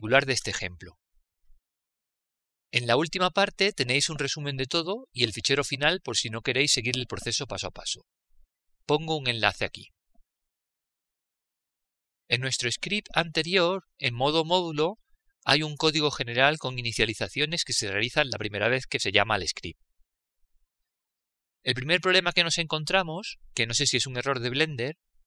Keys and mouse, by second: 15.7 click, 18.2 click, 21.3-22.5 middle drag, 22.5 click, 24.0-25.2 middle drag.